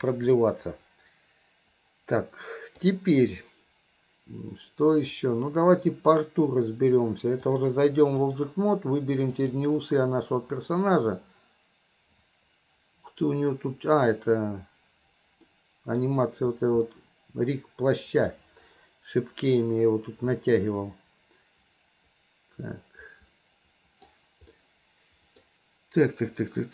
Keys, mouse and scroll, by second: 0.4-3.0 drag, 4.6 middle click, 7.4-8.5 drag, 9.4 click, 15.5-16.0 middle drag, 16.9-18.4 middle drag, 20.4-24.1 middle drag, 24.6-25.4 middle drag.